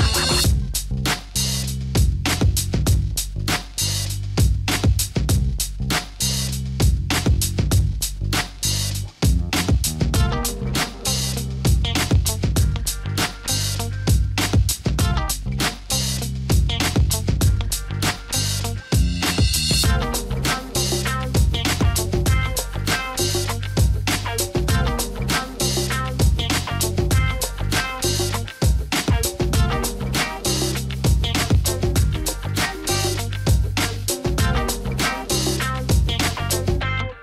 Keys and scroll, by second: 0.5-4.0 typing, 11.0-13.2 typing, 14.3-15.1 typing, 16.5 Left, 16.5-19.8 typing, 17.3 Left, 17.4 Left, 17.6 Left, 17.9 Left, 22.1 ctrl+t, 26.2-29.5 typing, 30.5 Down, 30.9 Up, 31.2 Down, 31.3 Down, 31.5 Down, 31.7 Down, 32.0 Up, 32.3 Up, 32.4 Up, 32.6 Up, 32.8 Up, 33.0 Down, 33.2-35.4 typing, 34.1 Up, 34.2 Up, 36.9 Down, 36.9-37.2 typing.